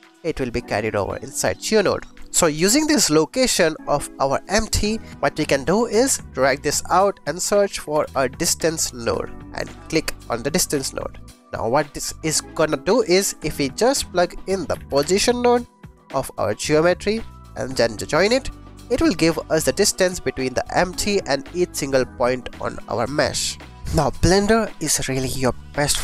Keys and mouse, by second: 2.4 click, 3.5 click, 4.4 click, 5.5-6.5 drag, 9.4 click, 10.1 click, 12.9 shift+a, 17.4 shift+a, 17.6 click, 18.2-19.8 drag, 19.9-20.9 drag, 22.7 click.